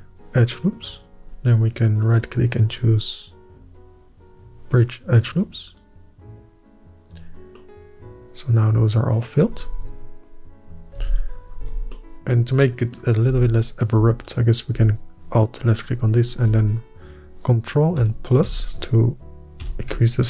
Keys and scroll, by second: 11.9 alt+a, 12.3 Tab, 14.0 Tab, 18.8 ctrl+KP_Add.